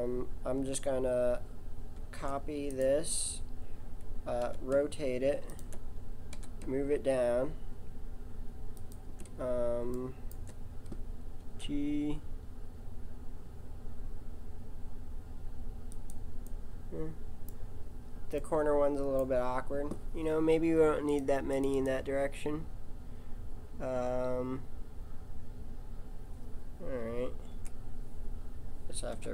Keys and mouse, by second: 1.9 shift+d, 4.4 r, 6.3 g, 9.5-12.5 middle drag, 11.4 g, 19.0 middle click, 21.1 click, 28.2 KP_7, 29.1 KP_7.